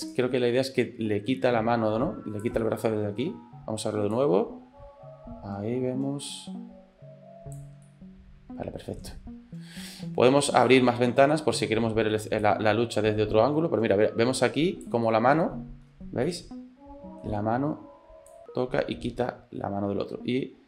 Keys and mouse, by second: 0.2-2.6 drag, 2.6 middle click, 4.2-7.7 drag, 7.9-9.0 middle drag, 10.7 middle click, 12.5-15.0 drag, 15.1 middle click, 16.3 middle click, 16.4 shift+click, 18.3-20.6 drag.